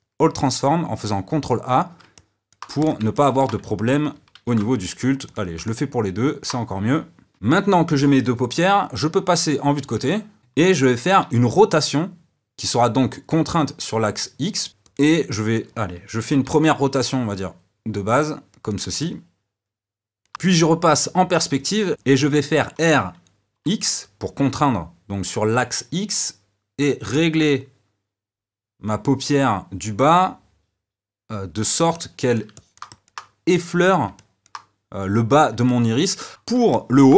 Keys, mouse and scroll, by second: 2.1 middle click, 2.8 click, 3.1-4.3 middle drag, 4.3 ctrl+a, 5.6-7.3 middle drag, 9.9 KP_3, 10.4 shift+middle click, 11.2 r, 15.3-16.5 drag, 16.5 r, 19.0-20.3 middle drag, 31.9-37.1 middle drag.